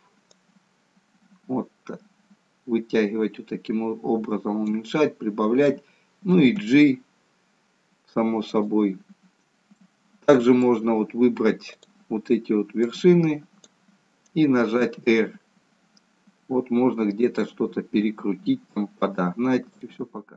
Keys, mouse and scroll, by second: 0.3 click, 4.9 middle click, 6.7 g, 9.8 middle click, 11.8 click, 12.9 click, 14.7 r.